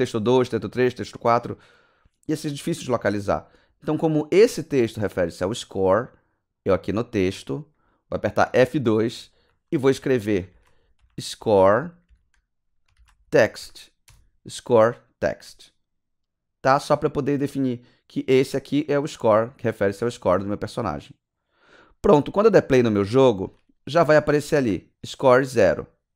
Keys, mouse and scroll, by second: 7.2 click, 8.5 F2, 9.3-14.1 typing, 22.5 click, 25.0 click, 25.7-26.1 typing.